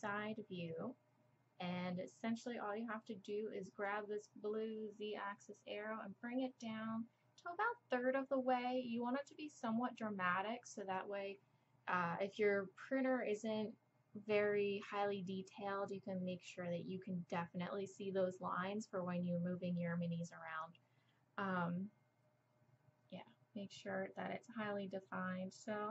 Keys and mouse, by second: 0.8-2.2 middle drag, 3.9-5.8 drag, 24.2-25.9 drag.